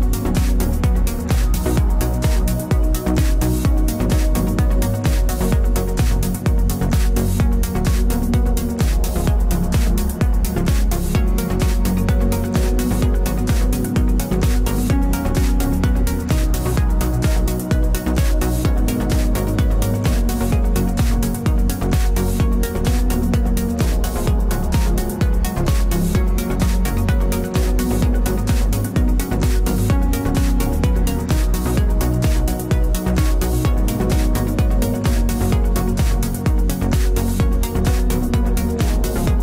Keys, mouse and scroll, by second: 0.5 ctrl+b, 1.4 Tab, 1.8 z, 4.9 ctrl+s, 10.3 Tab, 11.3 right click, 11.8 c, 12.7 right click, 12.9 z, 13.4 z, 13.7 c, 14.1 z, 14.4-15.7 middle drag, 15.0 Tab, 15.7-18.3 typing, 16.9-18.8 right drag, 17.7 Tab, 25.5 c, 26.8-27.9 right drag, 27.1 z, 27.9-29.6 middle drag, 29.9 e, 31.2-32.9 drag, 32.5 KP_3, 33.8 ctrl+b, 36.1 Tab, 36.9 z, 38.6 z, 38.9 z, 39.3 Tab.